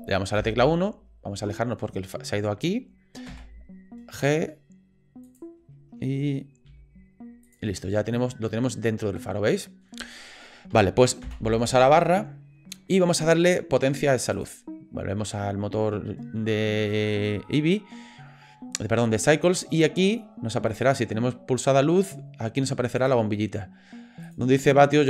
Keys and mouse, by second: 0.4 KP_1, 3.3 g, 6.7 g, 7.9-9.9 drag, 23.0 click, 24.4-25.0 drag.